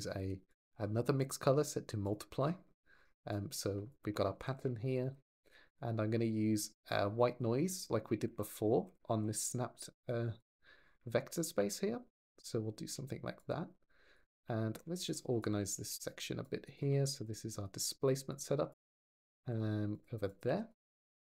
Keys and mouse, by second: 0.0 g, 1.0 click, 3.1 click, 4.3 ctrl+j, 4.8 g, 5.3 click, 5.5 click, 6.7 click, 11.1 ctrl+shift+click, 14.1 g, 14.6 Escape, 14.9 click, 15.3 g, 15.5 y, 16.9 g, 17.4 click, 18.1 click, 19.2 ctrl+j, 19.7 click, 20.1 click, 20.3 g, 20.5 click, 20.7 click.